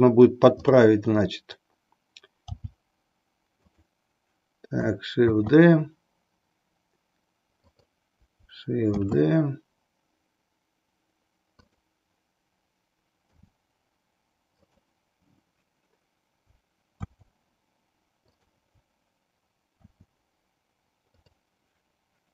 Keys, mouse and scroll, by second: 0.5 click, 2.5 g, 3.7 click, 5.3 shift+d, 7.7 click, 9.0 shift+d, 11.7 click, 13.2 r, 14.7 click, 17.1 shift+d, 19.8 shift+d.